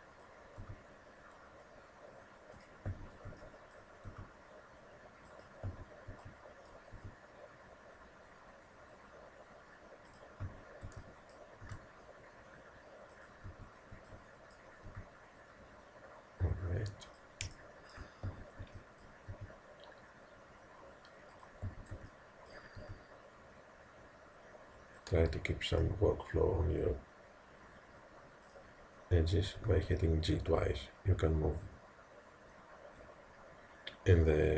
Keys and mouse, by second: 2.9 a, 3.3 b, 4.1 g, 5.8 a, 6.1 b, 7.0 g, 10.5 a, 10.9 b, 11.7 g, 13.6 a, 14.0 b, 14.9 g, 17.6 middle click, 18.3 a, 18.6 b, 19.3 g, 21.7 a, 22.0 b, 22.8 g, 25.6-28.5 middle drag, 28.5 click, 29.6 g.